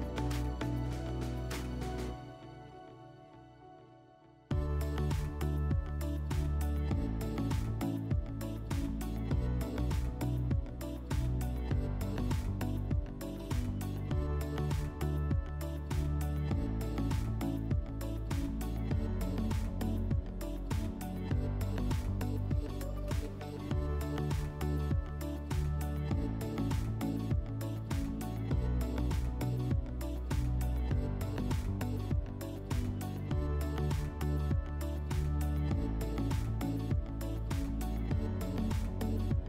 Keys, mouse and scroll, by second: 2.7 click, 10.3 click, 13.1 click, 17.6 click, 26.1 click, 26.9 click, 29.0 click, 30.0 click, 37.4 click.